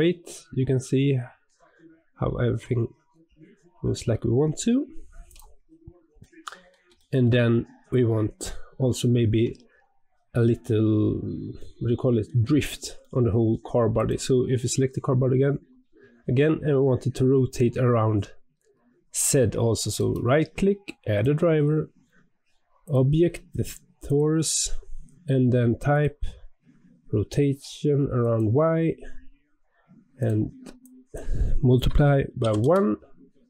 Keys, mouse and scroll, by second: 5.6 scroll down 3, 6.1-7.3 middle drag, 7.3-8.8 scroll up 2, 8.8-10.5 shift+middle drag, 10.5-11.5 scroll up 1, 11.5-13.9 middle drag, 13.9 click, 19.9-33.4 right drag.